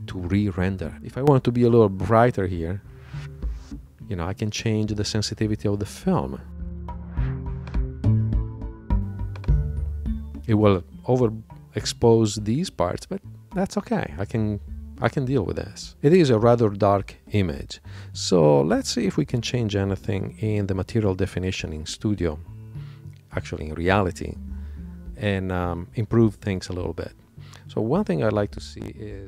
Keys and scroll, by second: 22.2 super+Tab.